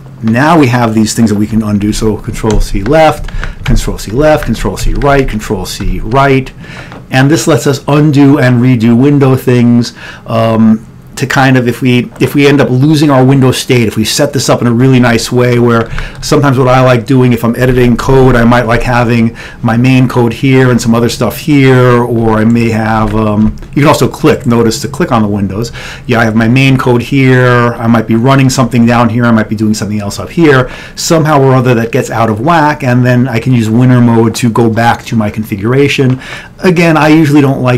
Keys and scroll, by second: 2.0 ctrl+c, 2.6 Left, 3.4 ctrl+c, 4.4 ctrl+c, 4.4 Left, 8.5 Left, 16.1 ctrl+x, 16.3 1, 17.7 ctrl+x, 20.7 3, 23.1 ctrl+x, 23.5 2.